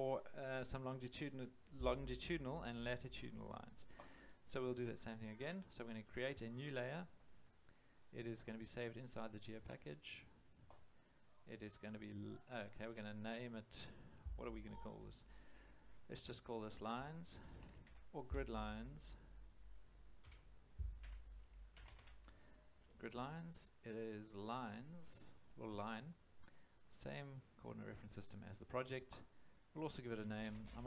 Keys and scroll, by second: 16.7-18.3 typing, 20.2 Home, 21.0-22.4 typing, 30.1-30.8 typing.